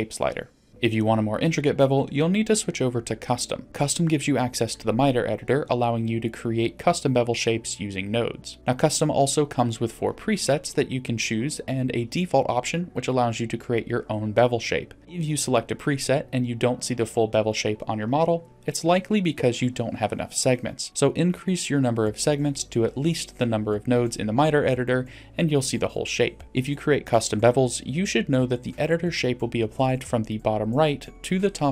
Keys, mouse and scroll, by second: 0.3 click, 0.5 click, 3.0 click, 3.7-5.7 scroll down 1, 5.7-7.0 scroll down 2, 8.7-15.0 drag, 15.3 middle click, 16.1-16.7 middle drag, 20.9-23.1 drag, 29.1 middle click.